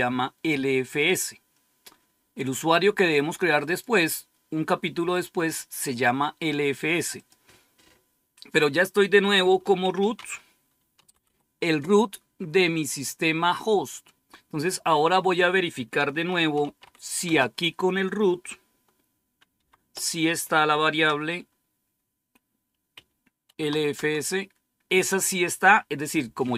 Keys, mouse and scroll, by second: 3.5 click, 7.0 click, 9.5-11.6 typing, 15.9-17.2 typing, 19.5 typing, 20.8 Caps_Lock, 21.0 typing, 22.8-24.1 typing.